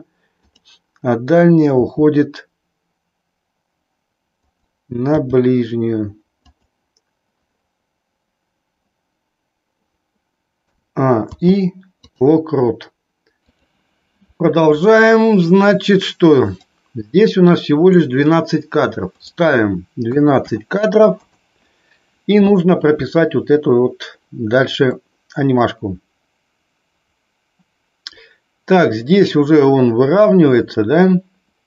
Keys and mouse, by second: 0.3-1.3 drag, 1.9 r, 5.3 g, 10.6 a, 11.4 i, 16.6-17.9 drag, 19.0-21.4 drag, 24.8-31.6 middle drag.